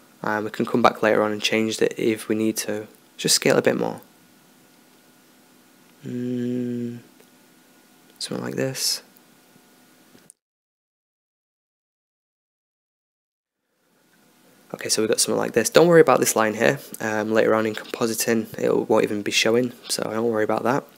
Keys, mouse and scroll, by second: 1.8-4.1 middle drag, 3.6 s, 4.1-6.8 drag, 10.8 middle click, 11.5 Tab, 13.1 KP_0.